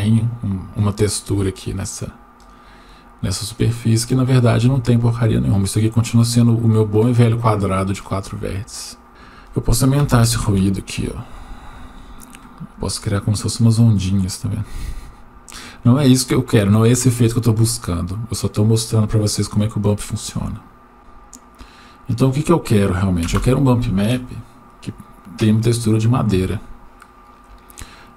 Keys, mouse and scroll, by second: 2.4-4.4 right drag, 9.1-10.5 drag, 21.4 click, 23.3 Delete, 25.8-26.2 scroll down 1, 26.5 shift+middle click.